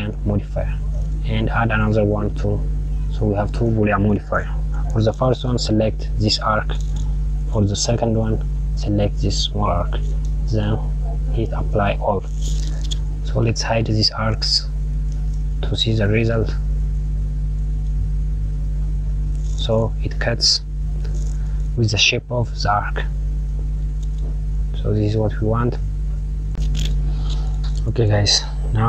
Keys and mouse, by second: 1.8-4.3 drag, 5.5 click, 8.6 click, 12.1-14.3 drag, 16.1 click, 17.2 click, 18.7 click, 20.2 click, 27.9 click.